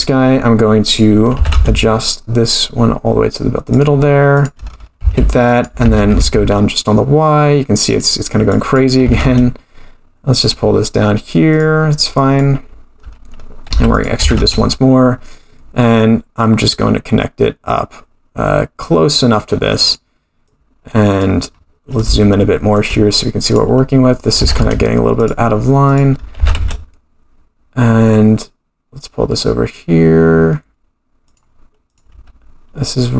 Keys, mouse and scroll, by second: 0.8 click, 1.3 g, 4.3 click, 5.0 e, 5.8 g, 8.5 click, 9.0 g, 12.2 click, 13.7 e, 14.2 g, 20.4 click, 21.5-22.1 scroll up 4, 22.1 shift+middle click, 23.4 click, 24.4 g, 25.9 click, 26.4 g, 31.8 click.